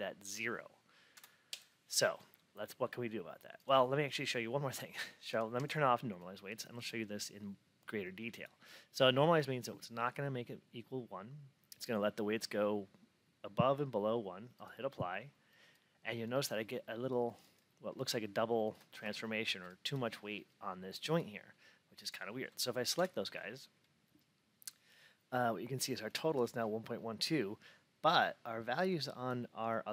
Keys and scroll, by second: 1.0 F8, 22.8 F8.